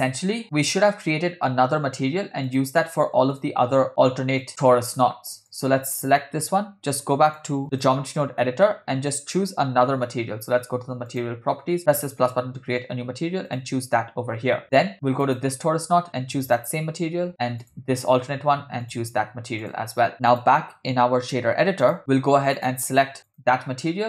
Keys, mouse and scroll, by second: 2.5 click, 3.4 shift+click, 4.4 drag, 4.9 click, 5.5 click, 7.3-7.9 drag, 8.4 scroll down 2, 8.7 middle click, 9.0-9.7 scroll up 4, 11.1 click, 11.8-12.2 drag, 13.5-14.6 drag, 15.2 click, 16.5 click, 17.6 click, 18.9-19.9 drag, 20.3-22.0 drag, 22.6-23.6 drag.